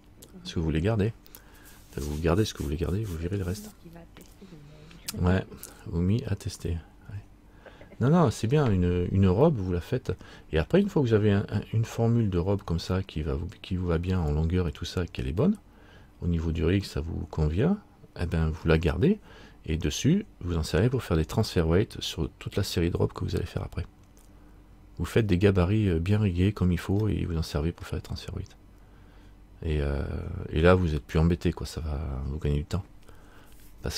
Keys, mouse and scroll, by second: 9.6 middle click, 13.3-13.7 scroll down 1, 15.6 middle click, 21.6 middle click, 25.8-27.1 scroll up 2, 27.2 middle click, 31.3 middle click.